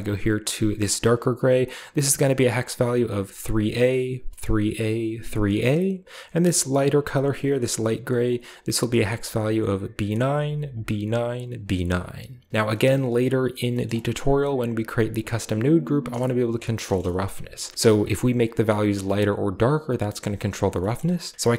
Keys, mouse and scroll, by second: 0.3 click, 1.2 click, 6.7 click, 8.1 click, 12.5-13.6 scroll down 2, 12.6 middle click, 13.6 middle click, 14.0 click, 14.4-16.7 drag, 16.8-17.7 middle drag, 20.8 middle click, 21.4 shift+a.